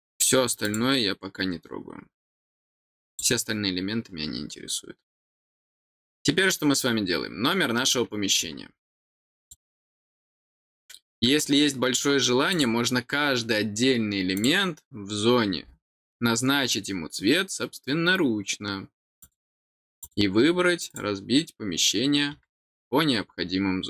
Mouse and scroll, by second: 0.6 click, 3.1 click, 9.4 click, 10.3 click, 12.5 click, 14.3 click, 19.2 click, 20.0 click, 20.9 click.